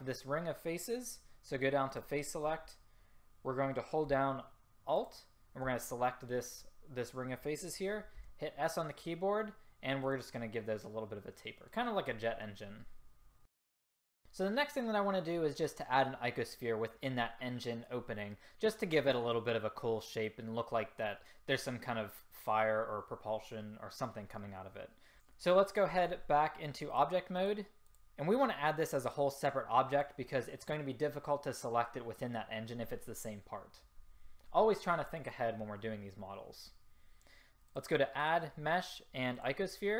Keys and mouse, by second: 5.1-8.3 drag, 8.3 s, 10.5-13.7 drag, 13.9 click, 15.4-26.1 drag, 27.0-34.1 drag, 27.0-29.7 typing.